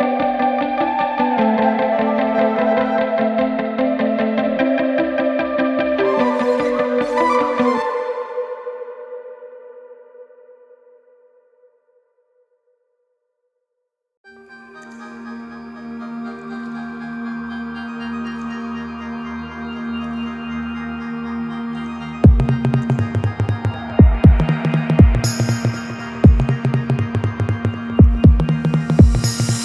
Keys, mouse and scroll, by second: 12.4-17.0 middle drag, 17.4 ctrl+b, 27.0 click, 28.9 g.